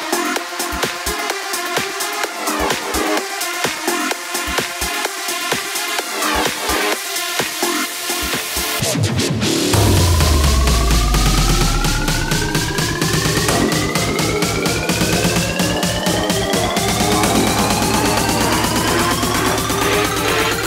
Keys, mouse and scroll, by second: 2.6 ctrl+z, 5.0-11.7 drag.